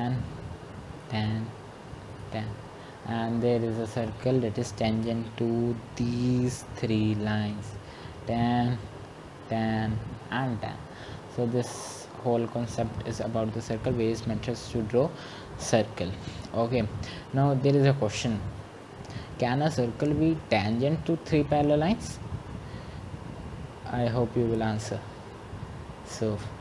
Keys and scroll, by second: 2.8-3.6 typing.